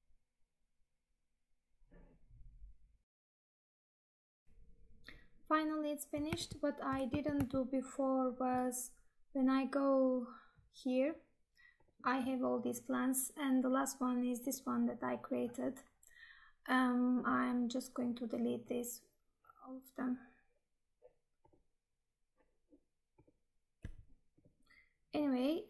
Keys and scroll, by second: 6.5 Tab, 7.2 alt+Tab.